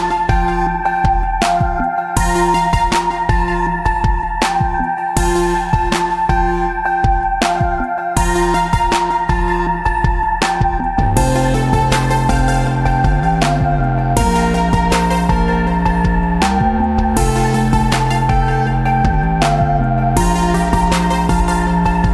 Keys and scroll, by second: 8.8 v, 9.8 Tab, 14.9 v, 15.5 ctrl+space, 16.5 ctrl+Tab, 16.7 ctrl+space, 17.3 space, 18.4 ctrl+space, 18.7 ctrl+s.